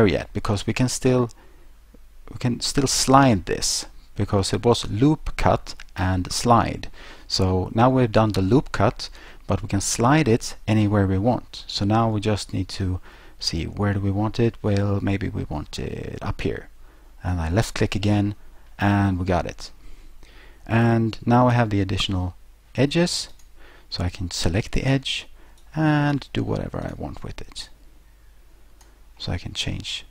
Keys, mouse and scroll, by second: 17.8 click, 23.3 right click, 24.5 middle click, 25.6 click, 26.9 right click, 27.7 click, 29.2 middle click.